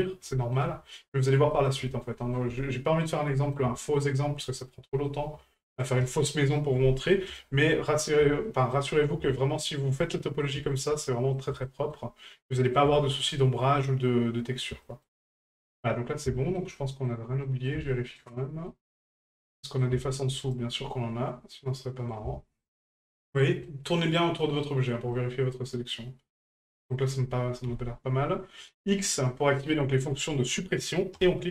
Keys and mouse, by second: 0.3 shift+middle drag, 1.2 ctrl+right click, 1.5 middle drag, 1.9 shift+middle drag, 2.2 middle drag, 3.0 ctrl+right click, 3.3 middle drag, 3.8-4.2 shift+middle drag, 4.3 middle drag, 4.9 shift+middle drag, 5.8 shift+right click, 7.4 shift+middle drag, 8.4 shift+middle drag, 9.1 shift+middle drag, 9.6 shift+middle drag, 10.0-10.4 middle drag, 10.6 shift+middle drag, 11.1 middle drag, 11.6-11.9 shift+middle drag, 12.5 middle drag, 12.9 shift+middle drag, 13.7-14.6 middle drag, 14.8 shift+middle drag, 15.2-16.2 middle drag, 16.3 shift+middle drag, 16.7-17.1 middle drag, 17.4 middle drag, 17.9 shift+middle drag, 18.7-19.8 middle drag, 20.4 shift+right click, 21.5-22.1 middle drag, 22.6-23.0 shift+middle drag, 23.2-23.7 shift+middle drag, 24.6 shift+middle drag, 25.1-26.7 middle drag.